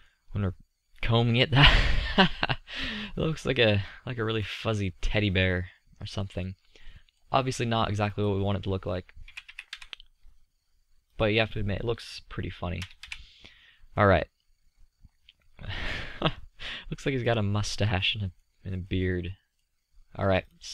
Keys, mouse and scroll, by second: 1.3 middle click, 2.4-3.5 middle drag, 7.1-10.4 middle drag, 11.4-14.1 middle drag, 14.4-16.1 middle drag, 16.5-18.4 middle drag, 20.3-20.7 middle drag.